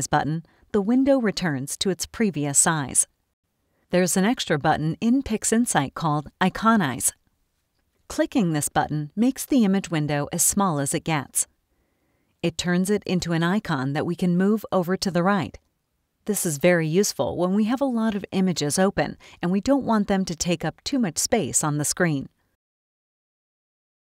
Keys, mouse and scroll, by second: 8.1 click, 12.4-16.5 drag, 17.0-20.0 drag, 20.8-22.8 drag.